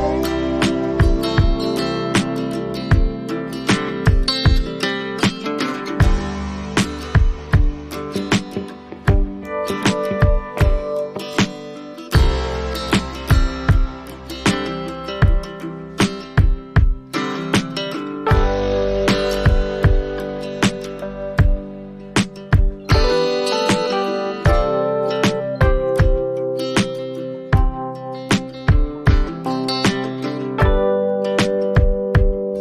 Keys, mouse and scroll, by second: 27.8 scroll, 27.9 click, 29.0 click, 30.3 click, 30.8 click.